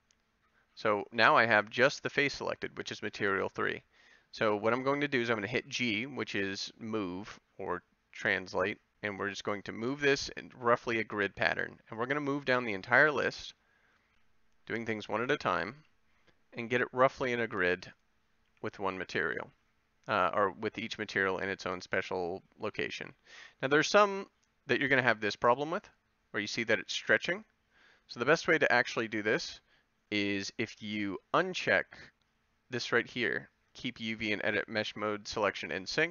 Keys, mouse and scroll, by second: 7.1 g, 11.3 a, 13.4 g, 15.7 a, 18.4 g, 20.6 a, 23.0 g, 33.5-36.1 middle drag.